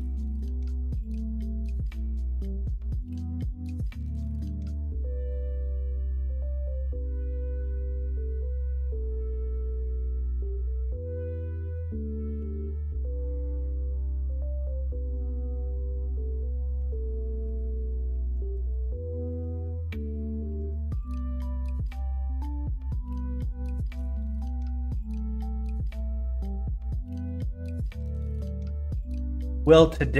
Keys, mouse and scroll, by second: 1.2 ctrl+z, 2.3 x, 3.6 Tab, 3.9 shift+a, 6.3 middle click, 6.8 KP_1, 7.1 KP_3, 11.3 x, 12.3 shift+a, 15.0-15.5 middle drag, 16.7 Tab, 17.3 r, 19.2 ctrl+z, 19.9 r, 26.8 middle click, 27.6 middle click, 28.5 middle click, 29.7 middle click.